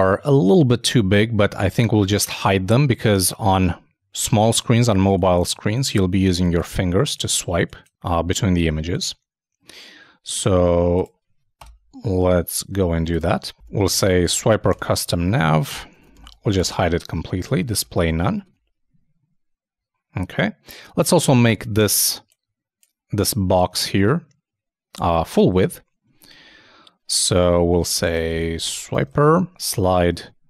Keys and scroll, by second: 15.4 shift+space, 15.4 shift+[, 15.6 shift+Return, 18.2 super+e, 18.4 super+Tab, 25.5 super+Tab.